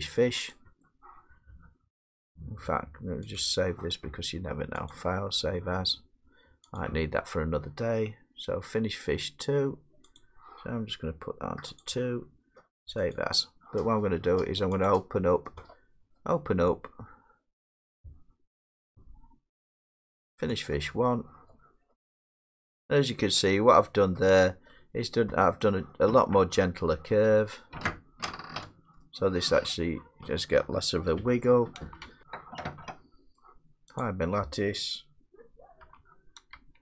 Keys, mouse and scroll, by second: 0.5 click, 3.4 click, 4.9 click, 7.2 click, 10.2 click, 13.1 click, 14.9 click, 19.8 click, 20.7 click, 23.2-24.1 drag, 24.1-25.3 middle drag, 29.9-32.0 middle drag, 31.1 Left, 32.0 Left, 33.4 middle click, 34.0 click, 35.8 h.